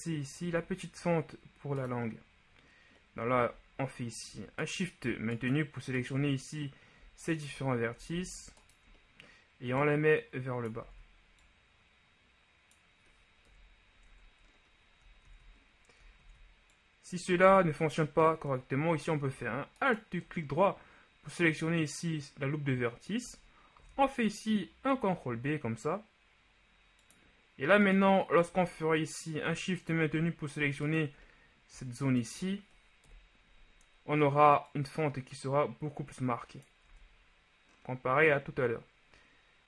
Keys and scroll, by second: 8.2 ctrl+shift+z, 11.0 ctrl+z, 13.7 KP_1, 14.2 Tab, 15.4 ctrl+z, 16.4 ctrl+z, 17.6 ctrl+z, 24.1 ctrl+b, 33.2 KP_1, 37.1 Tab.